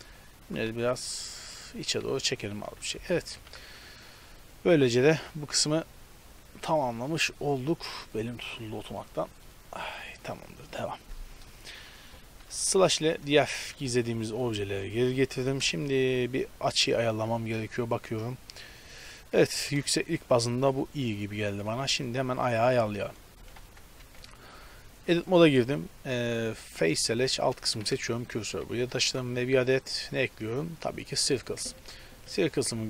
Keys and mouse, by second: 0.5 g, 1.8 z, 2.5 Tab, 2.9 a, 3.5 a, 11.5-12.7 middle drag, 12.7 KP_Divide, 13.8 z, 14.1 a, 15.6 KP_0, 16.1 z, 17.5 z, 18.0 z, 19.1 z, 23.1 right click, 23.6 KP_Decimal, 24.1 Tab, 26.7-28.6 middle drag, 27.9 shift+s, 28.8 Tab, 29.1 shift+a, 31.8 s.